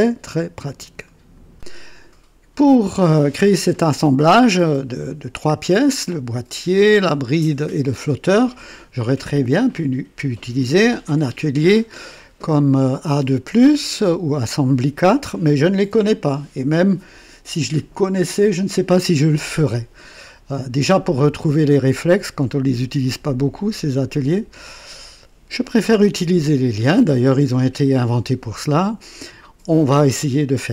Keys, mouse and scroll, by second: 1.4 right click, 1.5 click.